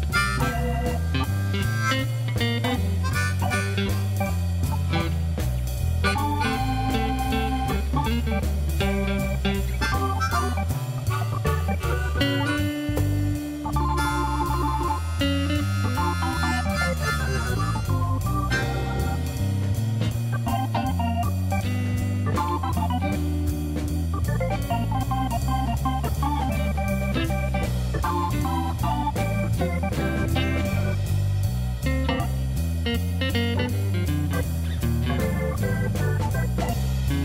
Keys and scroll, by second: 1.6 shift+d, 1.8 shift+z, 6.0 shift+d, 6.1 shift+z, 9.2 shift+d, 9.3 shift+z, 11.4 g, 11.5 z, 13.2 alt+a, 16.2 shift+d, 18.2 g, 19.7 g, 19.9 shift+z, 20.9 g, 21.0 z, 22.0 g, 23.2 g, 23.4 z, 25.3 shift+d, 25.8 y, 26.7 alt+a, 36.4 shift+d, 36.5 shift+z.